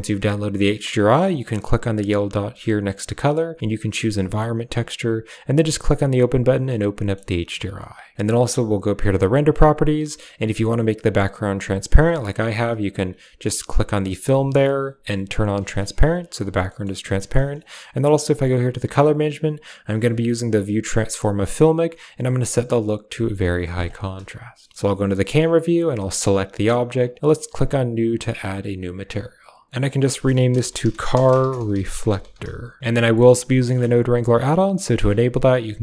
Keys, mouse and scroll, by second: 2.1-4.9 drag, 6.6-7.1 middle drag, 8.8 click, 11.5 click, 12.9 drag, 15.4 click, 16.7 middle click, 17.4 click, 18.3 click, 19.7-21.3 drag, 22.3-23.3 drag, 23.6 middle click, 24.4 KP_0, 27.4 click, 28.0 middle click, 29.9-32.8 drag, 32.8 a, 33.0 click, 35.7-35.8 drag.